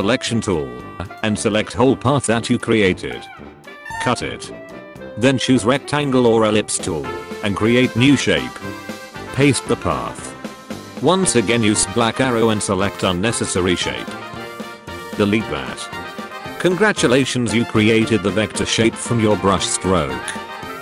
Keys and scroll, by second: 5.5 u.